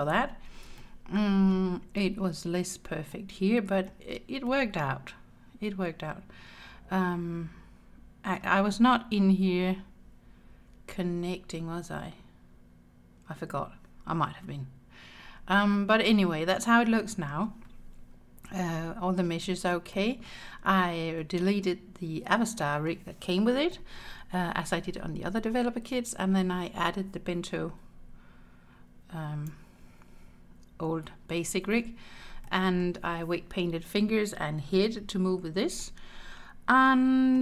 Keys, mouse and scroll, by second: 0.2-0.8 scroll down 3, 0.8 shift+middle click, 1.6-2.4 scroll up 7, 3.2 middle click, 4.5-8.4 middle drag, 8.8-11.0 scroll up 5, 14.8-15.7 scroll down 10, 15.7-17.3 middle drag, 18.5 Tab, 19.5 scroll down 2, 20.0 shift+middle click, 22.6 middle click, 23.7 scroll down 1, 23.8 middle click, 25.4 middle click, 29.6 n, 31.7 n, 32.5 middle click, 35.8-37.4 middle drag.